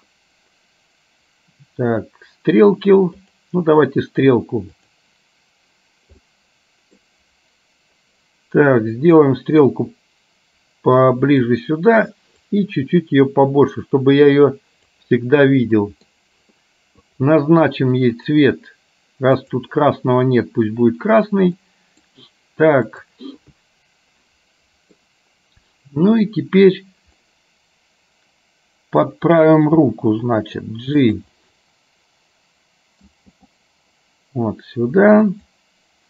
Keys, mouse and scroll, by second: 4.8 click, 6.3 middle click, 9.3-11.7 drag, 12.9-14.9 drag, 15.9 middle click, 17.2 click, 19.6 click, 21.7 middle click, 23.1 click, 24.3 middle click, 27.4-29.2 middle drag, 29.8 g, 31.4-33.4 middle drag, 33.4 g.